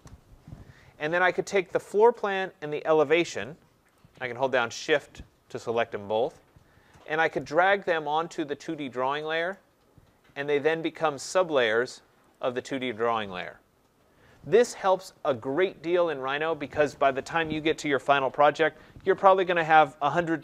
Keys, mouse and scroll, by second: 1.9 click, 4.0 shift+click, 9.5 click, 10.5 click, 11.4 click, 12.3 click, 12.8 click.